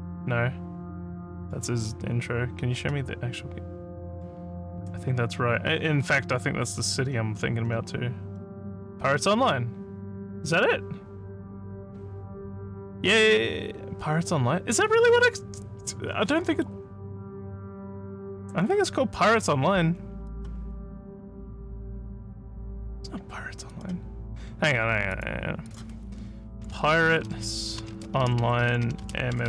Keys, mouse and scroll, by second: 6.1 scroll up 1, 7.0 scroll, 7.6 scroll, 8.3 scroll, 11.9 scroll down 2, 12.9 scroll up 1, 16.4 scroll down 1, 20.3 click, 23.7 click, 25.1 click, 25.7 click, 26.6-29.4 typing.